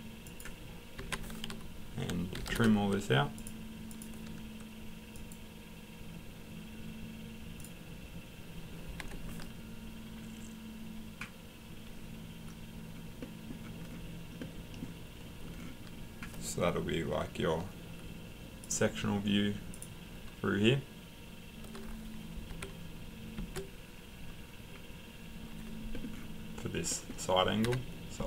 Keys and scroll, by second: 1.0 Escape, 2.1-2.9 typing, 9.0 Escape, 22.5 Escape, 27.6 Escape.